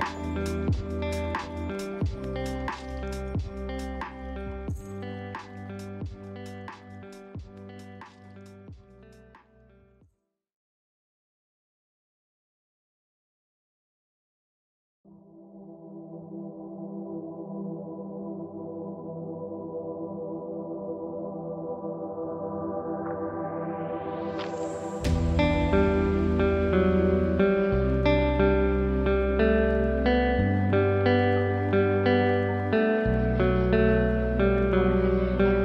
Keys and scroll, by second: 3.9 ctrl+space, 17.8 ctrl+space.